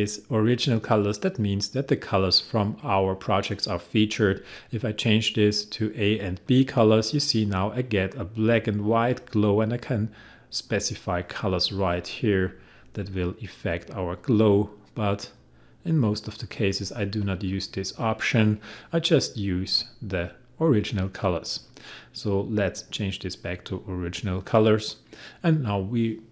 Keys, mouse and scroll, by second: 4.8 click, 10.7-17.2 drag, 19.7 click.